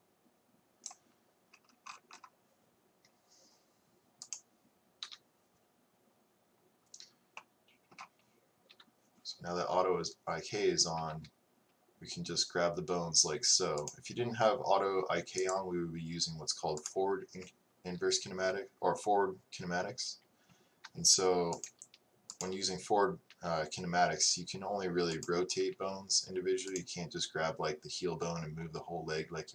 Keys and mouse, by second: 4.3 right click, 5.1 KP_3, 8.8 KP_3, 11.0 g, 16.9-23.4 drag, 23.4 g, 23.6-25.6 right drag, 25.6 g.